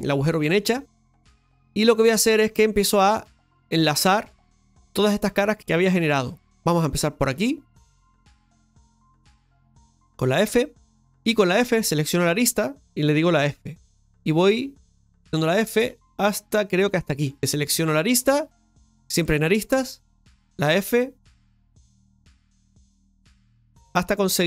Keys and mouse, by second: 1.4-4.9 shift+middle drag, 4.9-7.7 drag, 7.7 right click, 8.9 shift+right click, 11.0-17.4 right drag, 20.6-24.4 f.